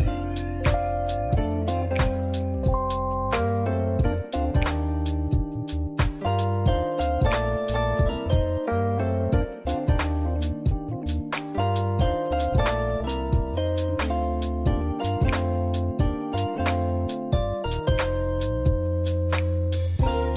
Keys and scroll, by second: 7.4 ctrl+z, 8.1 ctrl+z, 19.1 scroll up 1, 19.4 [.